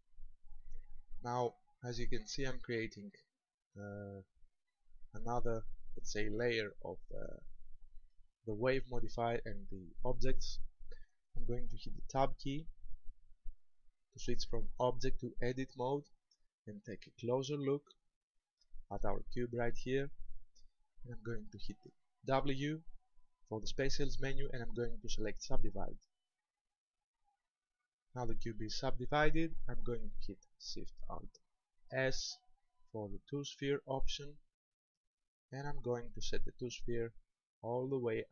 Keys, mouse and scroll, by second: 0.0-0.3 scroll down 3, 4.3 middle click, 7.2 shift+middle click, 12.2 Tab, 14.3 shift+middle click, 16.1-17.2 scroll up 5, 17.2-17.8 scroll up 2, 17.9 shift+middle click, 19.6-20.0 scroll up 3, 22.4 w, 31.9 alt+shift+s.